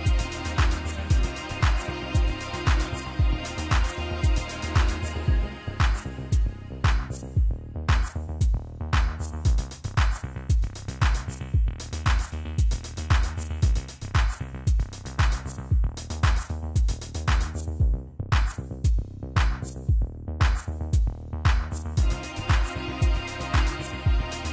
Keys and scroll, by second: 21.6-24.3 typing.